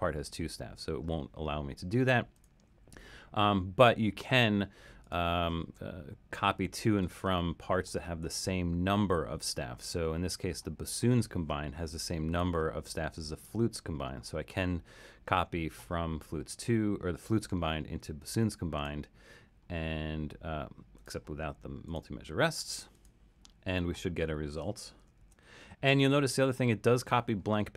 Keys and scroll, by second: 5.7 alt+super+., 25.2 super+u.